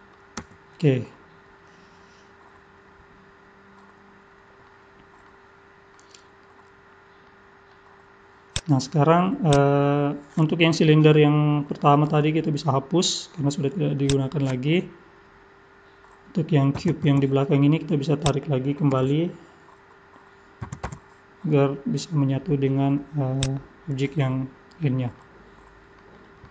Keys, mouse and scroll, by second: 0.4 Tab, 1.0 middle click, 4.9-5.2 scroll down 3, 5.2 middle click, 7.3 middle click, 8.5 click, 9.5 click, 12.0 Delete, 14.0 click, 16.8 g, 18.9 KP_3, 20.1-20.6 scroll up 2, 20.6 g, 23.7-24.2 scroll down 2, 24.2 middle click, 25.2 middle click.